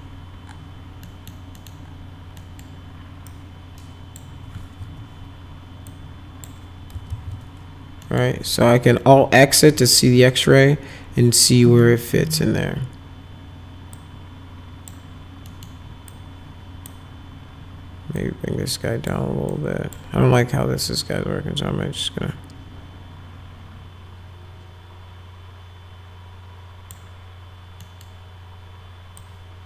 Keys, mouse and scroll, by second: 1.0 middle click, 1.5 middle click, 2.4 middle click, 3.3 click, 4.8 w, 5.9 click, 7.1 alt+x, 8.0 middle click, 11.8 middle click, 13.9 click, 15.5 middle click, 16.1 click, 18.2 click, 19.5 click, 20.9-26.9 drag, 27.8 middle click, 29.2 click.